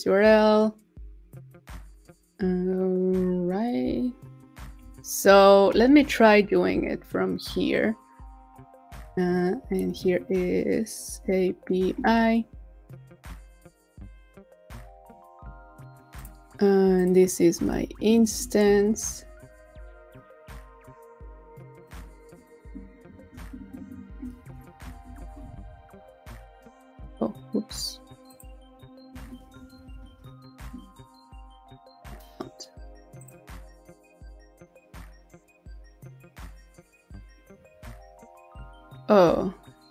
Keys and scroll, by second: 5.8 super+t, 6.4 super+v, 18.1 shift+super+Left, 18.7 super+c, 25.2 super+v.